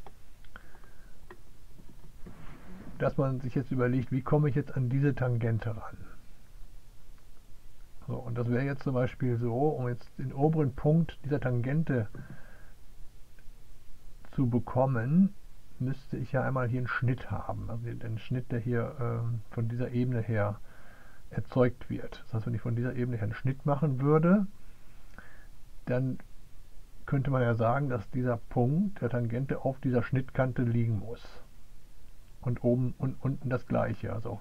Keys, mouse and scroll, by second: 0.0-34.4 drag.